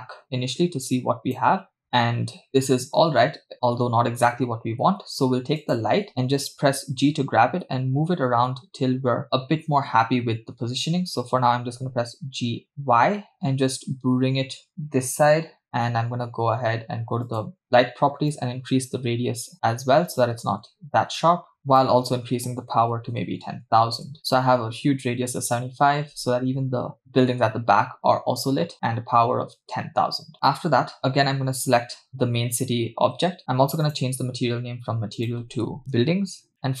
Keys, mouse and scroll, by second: 5.6 click, 7.0 g, 11.2 g, 17.3 click, 18.3-21.6 drag, 21.7-24.2 drag, 23.3 0, 23.4 0, 31.0 click, 33.8 click, 35.2-36.5 drag, 36.5-36.8 scroll down 4.